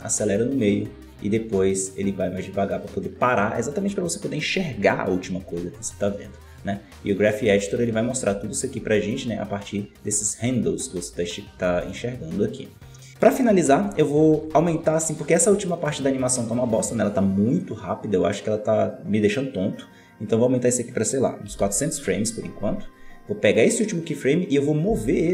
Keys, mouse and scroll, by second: 2.6-5.7 drag, 6.5-7.6 middle drag, 7.6-8.1 scroll down 1, 8.1 scroll up 1, 8.2 a, 11.6 alt+a, 13.1-18.8 drag, 20.3-21.6 drag, 21.6 KP_0, 23.4-24.3 right drag, 24.8 g.